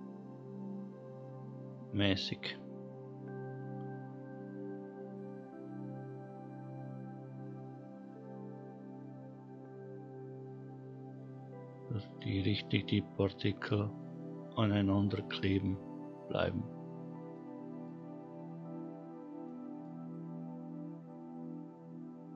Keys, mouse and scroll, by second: 3.4-6.3 scroll down 1, 12.1-12.8 middle drag, 13.0-14.1 scroll up 4, 15.2-15.8 middle drag, 16.6 scroll down 1, 17.6 middle click, 19.0 scroll down 1, 19.6-20.2 middle drag, 20.7-21.2 scroll down 1.